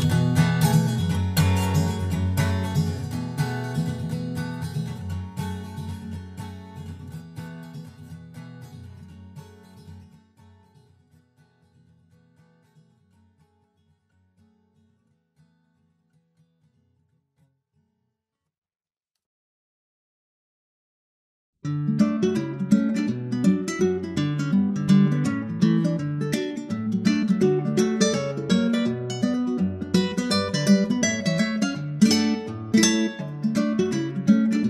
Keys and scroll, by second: 22.3 super+s, 23.1 super+Tab, 28.9 super+Tab, 30.2 super+Tab.